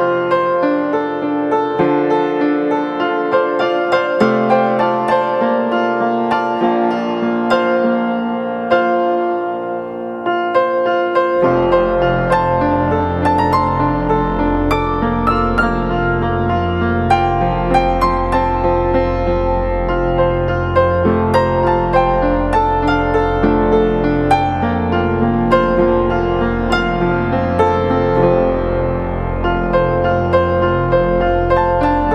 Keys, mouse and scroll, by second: 8.1 double click.